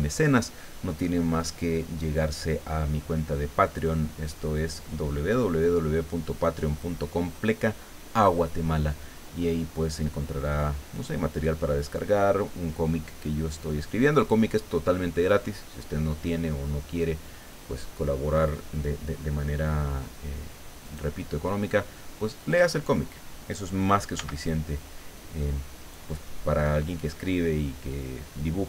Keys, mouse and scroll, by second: 20.9 right click, 22.4 click, 24.2 b, 24.5-26.1 drag.